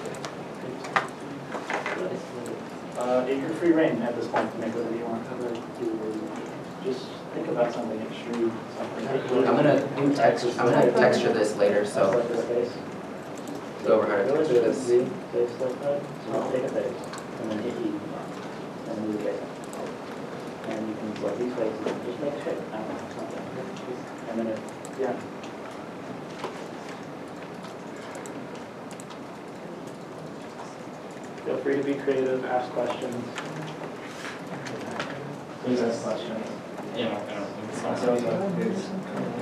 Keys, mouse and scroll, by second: 1.1 g, 2.7 middle click, 6.8 shift+click, 14.3 shift+click, 14.7 middle click, 15.9 g, 15.9 y, 17.5 right click, 19.2 3, 19.2 middle click, 20.2 scroll, 21.1 scroll up 1, 21.5 middle click, 22.2 2, 23.0 g, 23.2 y, 25.3 middle click, 27.7 click, 28.7 shift+click, 29.4 middle click, 30.3 shift+click, 35.0 middle click, 35.0 ctrl+z, 35.2 ctrl+z, 36.2 ctrl+z, 37.1 ctrl+z.